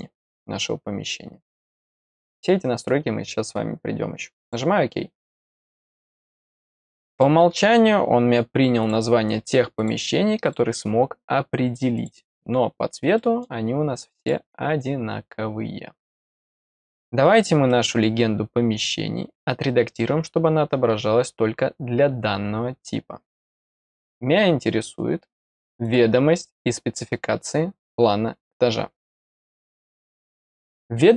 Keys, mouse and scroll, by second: 4.4 click, 5.6 middle click, 7.1 click, 8.8 click, 9.7 click, 10.4 click, 11.9 click, 13.1 middle click, 14.1 click, 17.6 middle click, 18.7 click, 23.9 scroll down 1, 24.6-25.8 scroll down 5, 25.8 click, 29.0 click, 29.2 click.